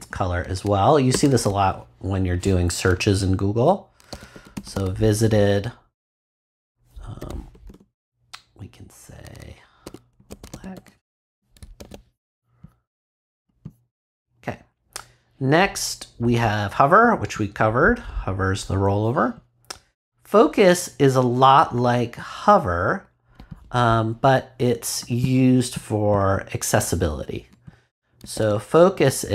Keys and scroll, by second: 1.1 Return, 4.1-5.2 typing, 6.9-8.1 typing, 9.8 b, 10.1 l, 10.7 k, 11.2 ;, 11.7 super+s, 28.3 super+c.